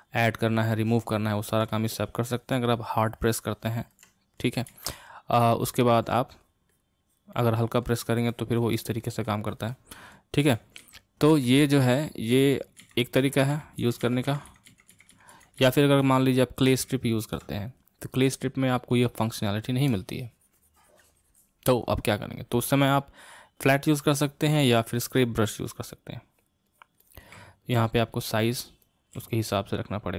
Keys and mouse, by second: 4.8 ctrl+z, 5.6 ctrl+z, 6.4-10.6 drag, 10.6 ctrl+z, 10.9 ctrl+z, 11.5 ctrl+z, 12.0 ctrl+z, 12.5 ctrl+z, 12.9 ctrl+z, 13.3 ctrl+z, 13.7 ctrl+z, 13.9 ctrl+z, 14.2 ctrl+z, 14.4-15.1 ctrl+z, 15.3 ctrl+z, 15.5 ctrl+z, 15.7 ctrl+z, 16.1 ctrl+z, 16.8 ctrl+z, 18.9-22.9 drag, 24.9-27.7 drag, 27.7 f, 28.5 click, 29.1 f, 29.8-30.1 drag.